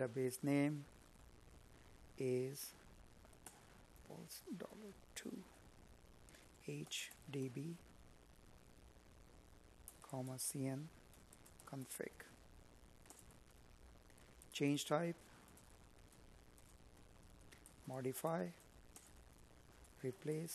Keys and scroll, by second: 6.7 Tab, 10.8 space, 12.6 Tab, 15.8 space, 19.3 Tab.